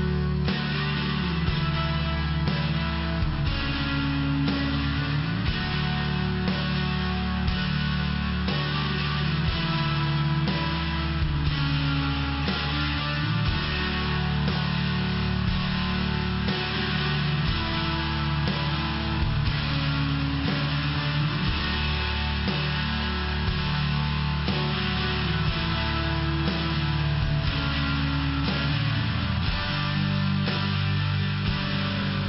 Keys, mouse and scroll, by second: 0.5 click, 0.6 click, 1.0 click, 1.2 click, 1.5 click, 1.6 click, 2.0 click, 2.2 click, 2.6 click, 2.7 click, 3.3 click, 3.4 click, 3.9 click, 4.0 click, 4.4 click, 4.6 click, 5.0 click, 5.7 click, 5.8 click, 6.3 click, 6.4 click, 6.8 click, 9.0 click, 9.1 click, 9.5 click, 9.6 click, 10.2 click, 10.4 click, 11.2 click, 11.3 click, 12.0 click, 12.1 click, 12.4 click, 12.6 click, 12.9 click, 13.0 click, 13.4 click, 13.6 click, 14.0 click, 14.1 click, 14.5 click, 14.7 click, 15.7 click, 15.9 click, 16.2 click, 16.4 click, 16.8 click, 16.9 click, 17.3 click, 17.5 click, 17.8 click, 19.2 click, 19.3 click, 19.8 click, 20.0 click, 20.3 click, 20.5 click, 20.9 click, 21.0 click, 21.7 click, 21.8 click, 22.3 click, 23.2 ,, 23.8 click, 23.9 click, 26.3 click, 26.4 click, 28.3 click, 28.5 click, 29.9 click, 30.0 click, 30.8 click, 30.9 click.